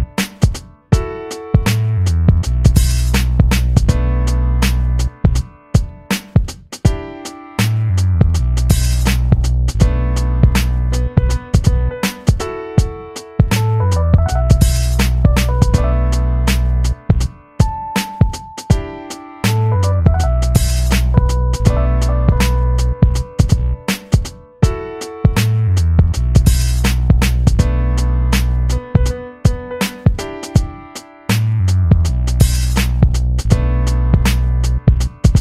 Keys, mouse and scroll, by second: 1.2 a, 2.8 click, 6.4 shift+Down, 9.3 v, 10.3 click, 12.8 i, 13.9 click, 16.7 v, 17.0 click, 18.8 shift+[, 20.0 ctrl+[, 22.4 click, 23.3 space, 23.5 click, 23.8 space, 27.3-33.4 drag.